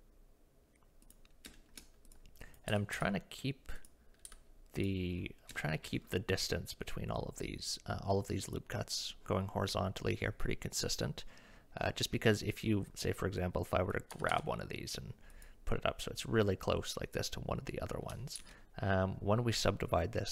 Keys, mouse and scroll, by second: 1.6 shift+middle click, 2.1 click, 2.4 click, 2.7 g, 4.3 g, 5.6 shift+middle click, 13.4 click, 14.1 g, 18.4 ctrl+z.